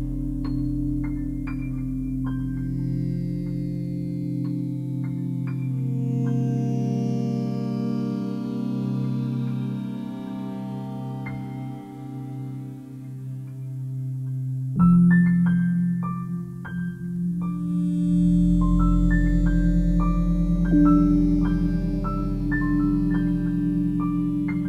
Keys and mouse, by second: 0.0 m, 0.9 middle click, 1.1 click, 1.8 ctrl+z, 3.1 m, 4.4 click, 5.8 click, 7.2 click, 8.7 click, 9.7 click, 14.9 Delete, 15.5 click, 16.8-18.0 ctrl+alt+drag, 18.1 ctrl+z, 18.6 ctrl+alt+click, 22.2 click.